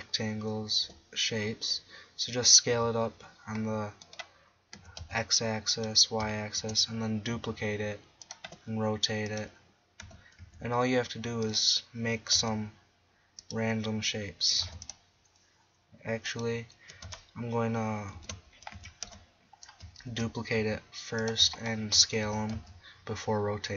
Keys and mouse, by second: 0.9 r, 4.1-5.3 drag, 4.8 s, 6.6 shift+d, 7.7 middle click, 8.5 r, 10.1 s, 12.4 s, 13.5-14.7 drag, 14.7 x, 14.9 click, 18.1 ctrl+a, 18.7 a, 19.1 a, 20.1 shift+d, 22.3 s.